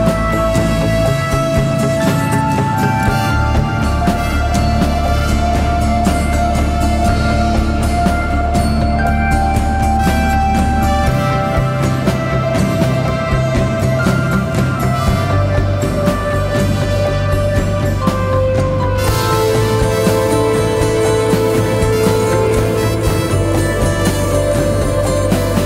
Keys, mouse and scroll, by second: 2.3 click, 5.4 right click, 6.0 click, 8.7 shift+click, 11.6 ctrl+z, 12.0 click, 15.1 shift+click, 16.5 shift+click, 21.5 right click, 22.3 click.